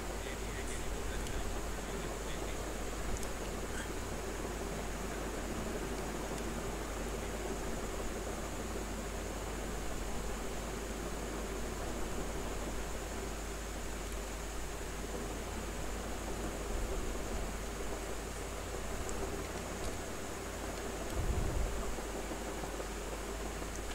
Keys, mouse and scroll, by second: 1.2 space, 1.4 alt+click, 3.4 r, 3.6-5.8 drag, 5.8 b, 7.0 space, 7.9 ctrl+click, 10.8 space, 11.0 click, 11.3 space, 12.2 click, 12.7 space, 13.2 ctrl+z, 13.6 click, 14.0 space, 14.1 click, 14.6 space, 15.0 click, 15.6 space, 15.9 alt+click, 17.7 click, 19.4 ctrl+d, 21.0 space, 21.2 click, 21.5 space, 22.5 click, 22.8 space, 23.4 alt+click.